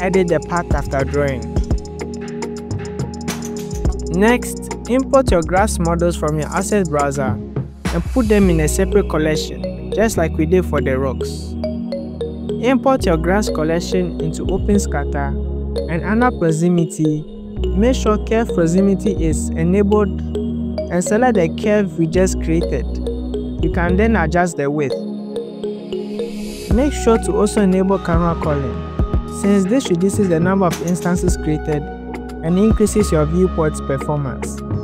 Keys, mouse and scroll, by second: 0.0-2.5 typing, 0.1 shift+click, 0.2 click, 0.6 click, 0.9 scroll down 3, 1.1 shift+click, 1.1 scroll up 3, 1.1 click, 1.6 right click, 2.0 shift+click, 2.1 scroll up 2, 2.2 click, 2.2 shift+click, 2.3 click, 2.5 click, 3.1 click, 3.1 scroll down 4, 3.3 F2, 3.7 click, 3.9-4.3 scroll down 5, 4.5 click, 4.6 scroll up 9, 4.9-5.3 scroll down 9, 6.1 click, 6.4 shift+click, 6.6 s, 7.3 click, 7.5 click, 7.6-8.8 scroll down 15, 7.7 click, 7.9 click, 8.0 click, 8.6 click, 8.8 click, 9.2 BackSpace, 9.3 s, 9.5 click, 9.5 click, 10.0 click, 10.1 scroll up 5, 10.2 click, 10.3 click, 10.6 click, 10.9 click, 11.1 scroll down 7, 11.3 click, 11.4 click, 11.6 click, 11.6-12.0 scroll up 5, 12.1 click, 12.4-12.7 scroll down 1, 12.7 click, 13.2-13.8 scroll down 6, 13.8 shift+click, 16.1 click, 16.7-17.2 scroll down 1, 17.2-18.4 scroll down 9, 18.0-18.4 drag, 19.1 click, 19.7 click, 20.9 click, 21.7-23.2 drag, 24.6 shift+click, 26.8-28.1 scroll up 7, 28.1 scroll up 1, 28.6-29.7 scroll down 10, 29.7 click, 29.7 scroll down 1, 31.2 click, 32.8 shift+click, 34.1-34.8 scroll up 9.